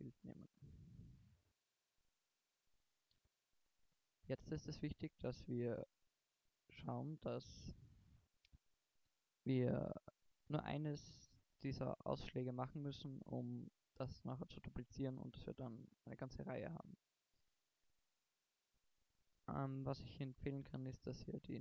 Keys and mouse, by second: 0.0-0.7 drag, 0.8-1.9 drag, 1.9 middle drag, 2.3 click, 13.5 middle click, 16.3 middle click, 16.7 middle drag, 17.9 Tab, 18.8-19.9 middle drag.